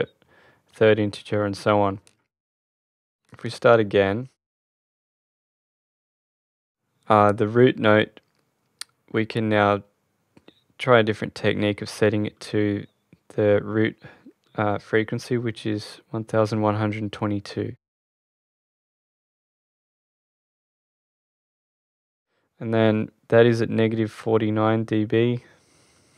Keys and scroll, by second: 15.3 1, 16.8 2, 18.3 Return.